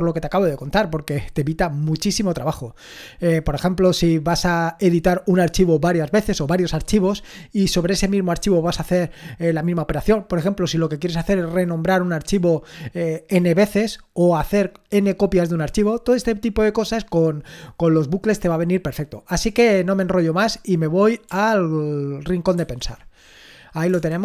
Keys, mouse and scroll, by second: 22.6 ctrl+1, 23.9 BackSpace.